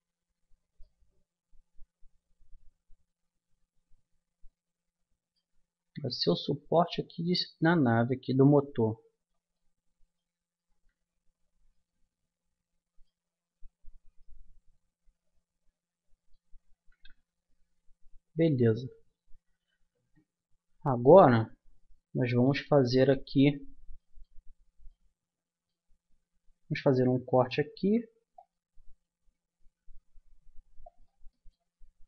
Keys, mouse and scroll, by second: 0.4 Tab, 5.8 Tab, 6.9-9.2 middle drag, 10.7 Tab, 16.9 Tab, 18.0 Tab, 20.7 Tab, 25.2-27.6 middle drag, 27.6 ctrl+r, 31.3-32.0 middle drag.